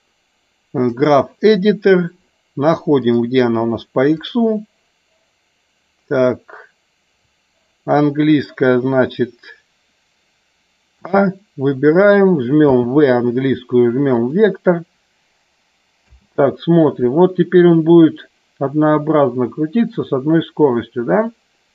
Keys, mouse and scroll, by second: 3.0 click, 4.1 click, 15.9 space.